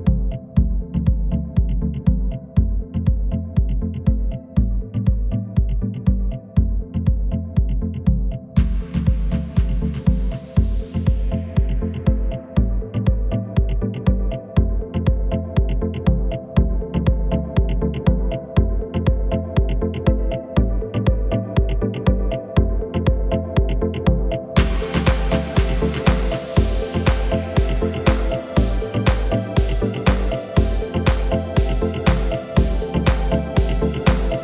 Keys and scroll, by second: 1.9 Return, 10.8 Return, 17.5 Return, 22.7 Return, 27.2 Return.